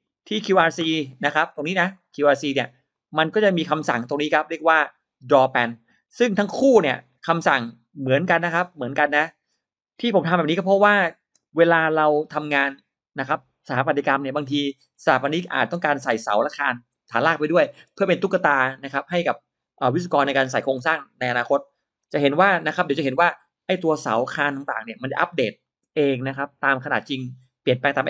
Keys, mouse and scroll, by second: 1.8 click, 2.8 click, 6.4 click, 8.6 drag.